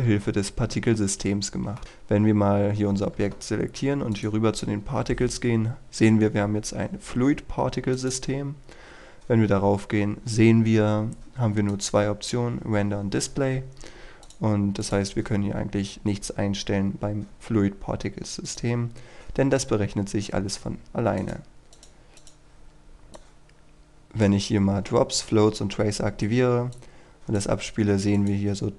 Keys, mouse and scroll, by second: 2.3-4.2 scroll down 1, 4.2-27.9 drag.